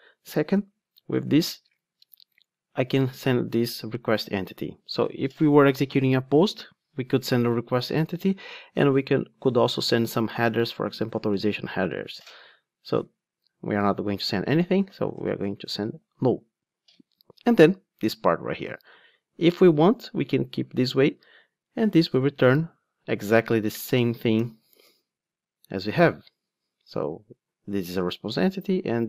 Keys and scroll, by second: 1.6 super+p, 24.3 alt+Return.